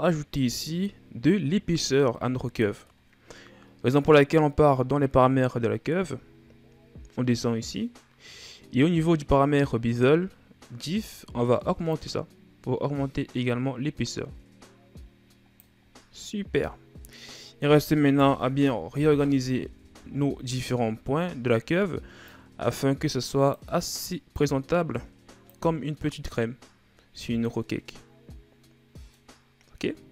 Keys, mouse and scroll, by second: 0.3 click, 2.0-5.0 middle drag, 6.2-7.1 scroll down 3, 7.1-10.3 scroll down 7, 11.7-14.8 drag, 15.6-16.0 scroll down 3, 16.0-18.0 middle drag, 18.0 KP_1, 19.5-19.9 ctrl+scroll down 1, 19.9 shift+scroll up 3, 20.7-21.3 ctrl+scroll up 1, 21.3-22.1 scroll up 3, 22.1-25.6 drag, 25.6 scroll down 1, 25.9-28.9 middle drag, 29.1-30.0 scroll up 2, 30.0 Tab.